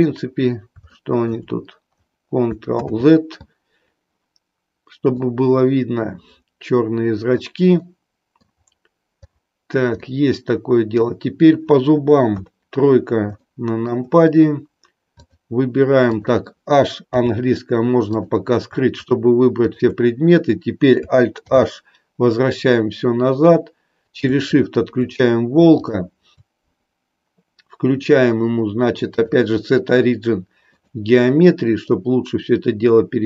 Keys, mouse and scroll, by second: 0.9 shift+middle drag, 2.8 ctrl+z, 5.2-7.4 drag, 7.7-8.4 middle drag, 10.0-10.9 middle drag, 12.3 KP_3, 13.4 shift+middle click, 15.0 click, 16.0 click, 17.0 h, 18.9 shift+click, 19.5 shift+click, 21.4 alt+h, 25.7 shift+click, 29.2-30.9 drag, 31.8-33.2 drag.